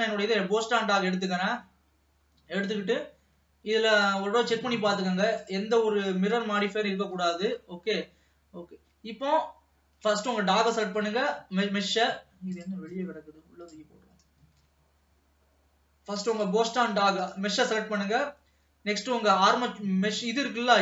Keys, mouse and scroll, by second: 0.8 ctrl+s, 1.1 scroll up 2, 4.0 click, 5.5 click, 7.4 ctrl+s, 7.6-12.6 middle drag, 12.6 click, 13.1 click, 14.8 ctrl+s, 16.4 click.